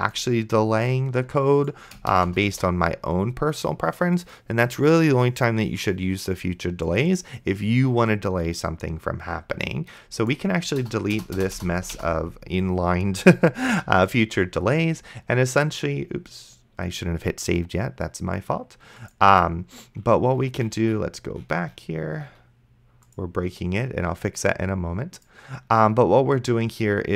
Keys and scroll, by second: 2.1 Return, 2.7 ctrl+v, 11.1 BackSpace, 14.1 ctrl+s.